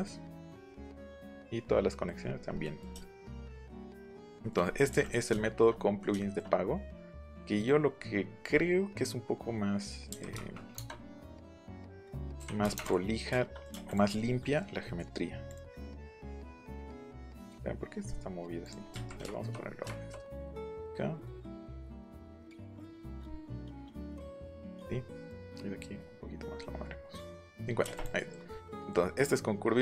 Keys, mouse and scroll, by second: 0.0-1.2 middle drag, 1.8 middle click, 2.2 middle click, 2.4 scroll, 3.0-3.6 shift+scroll, 4.1 click, 4.3 shift+scroll, 5.0 click, 10.0 KP_3, 10.3 KP_0, 10.4 KP_0, 10.7 KP_Enter, 11.4 click, 12.3 KP_5, 12.6 KP_0, 12.7 KP_Enter, 13.3 shift+middle click, 13.8 click, 15.4 click, 16.7-17.3 scroll up 3, 17.3-17.9 scroll down 1, 18.0 scroll down 1, 18.6 click, 18.8 scroll down 1, 18.8 scroll up 1, 18.9 Right, 24.6 click, 24.8-25.2 scroll down 1, 25.2-26.4 drag, 27.3 click, 27.6 middle click, 27.9 click, 28.1-28.8 scroll up 4.